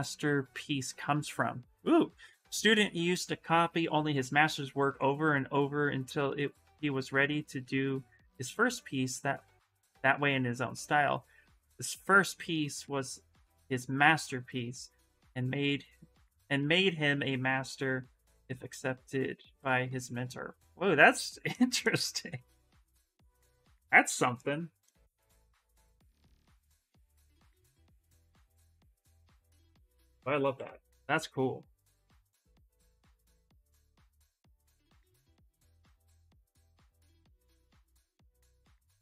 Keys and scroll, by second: 22.1 s, 29.9-31.2 typing.